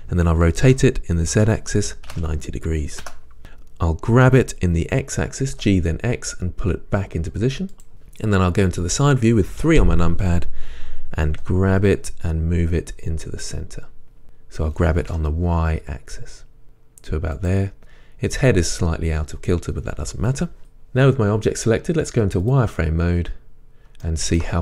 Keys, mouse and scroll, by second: 0.7 r, 3.4 Return, 4.3 g, 8.0 click, 9.6 KP_3, 11.4 g, 20.5 click, 22.5 click, 23.0 scroll up 1, 24.1 shift+middle click.